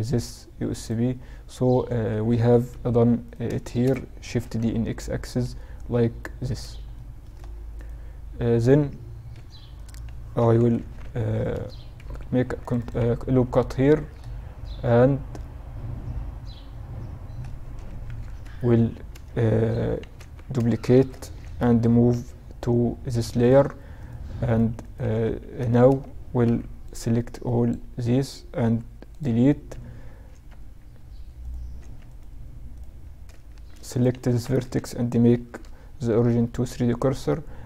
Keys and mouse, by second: 1.0 Tab, 1.8 alt+h, 2.3-4.3 drag, 3.4 shift+d, 6.1-9.8 drag, 8.5 h, 9.7 KP_7, 9.8 middle click, 10.0 Tab, 10.1 z, 10.6 a, 11.4 ctrl+r, 13.3 z, 17.0 KP_7, 17.2 z, 18.2 a, 19.3 Tab, 20.1 shift+d, 21.3 m, 23.1-25.0 drag, 24.2 Tab, 24.7 a, 25.0 a, 25.6 b, 27.7 x, 29.4 Tab, 31.0 Tab, 31.8-33.4 right drag, 32.6 shift+s, 33.4 Tab, 33.6 click, 37.1-37.6 ctrl+alt+shift+drag.